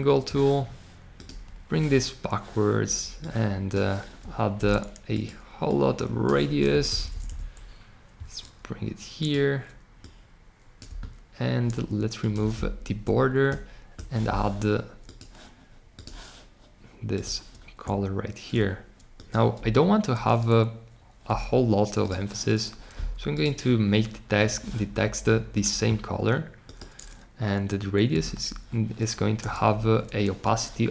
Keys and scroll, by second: 19.5 Escape, 28.0 1.